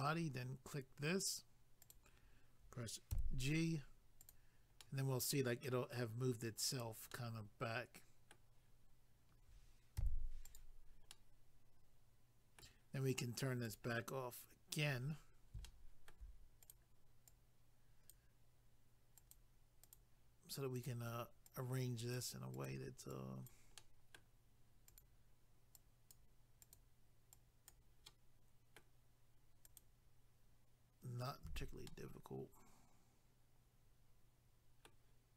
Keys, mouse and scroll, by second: 1.8 click, 3.1 g, 4.2 click, 4.8 middle click, 6.7 click, 7.1 middle click, 10.5 click, 11.1 middle click, 13.7 click, 15.0 scroll up 1, 15.6 shift+middle click, 16.6 click, 17.3 click, 19.2 click, 19.8 click, 20.7 click, 21.4 click, 22.5 click, 23.1 click, 23.8 middle click, 24.9 click, 26.6 click, 28.1 middle click, 29.6 click, 31.4 a, 31.8 middle click.